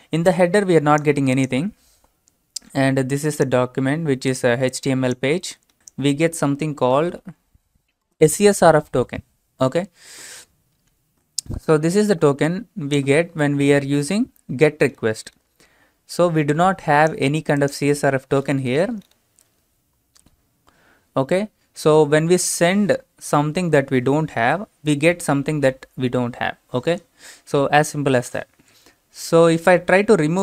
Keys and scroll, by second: 6.7-8.4 typing.